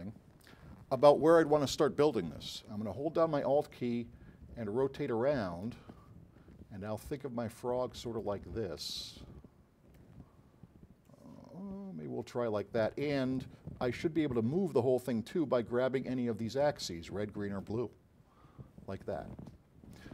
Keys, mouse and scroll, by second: 3.8-5.9 alt+drag, 7.1-8.4 drag, 9.1 alt+click, 9.9 alt+click, 11.3-12.7 drag, 14.4-17.8 drag.